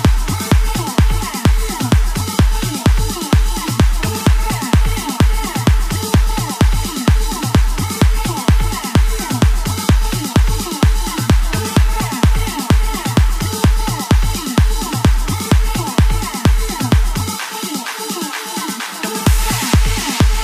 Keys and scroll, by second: 2.3 ctrl+t, 7.9 ctrl+t, 9.0 ctrl+t, 10.1 ctrl+t, 11.0 ctrl+t, 11.6 ctrl+t, 12.0 ctrl+t, 14.2 ctrl+t.